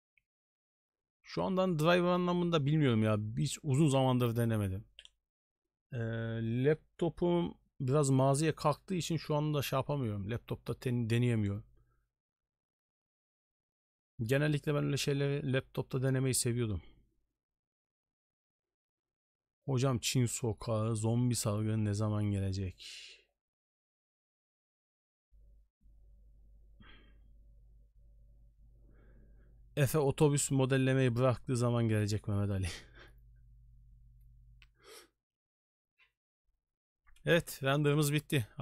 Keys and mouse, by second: 38.2 middle drag.